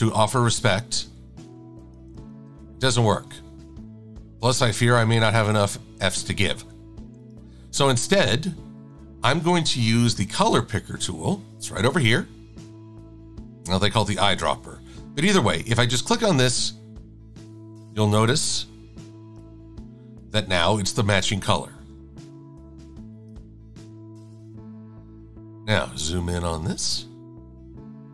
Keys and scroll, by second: 2.0 shift+f, 10.2 i.